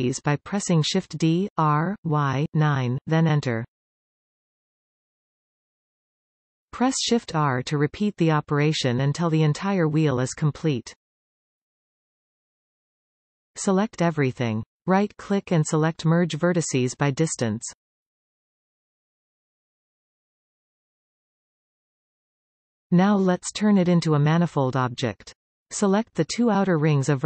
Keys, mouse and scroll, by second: 0.1 shift+d, 1.4-2.9 middle drag, 2.9 Return, 4.4-6.3 middle drag, 6.3 shift+r, 7.4-10.7 middle drag, 13.2-13.5 scroll down 2, 13.5 middle click, 14.1-15.5 scroll down 2, 15.5 scroll down 1, 15.5 a, 17.2-21.1 right drag, 21.5-27.2 middle drag, 25.7 alt+a, 26.9 a, 27.0-27.2 scroll up 2.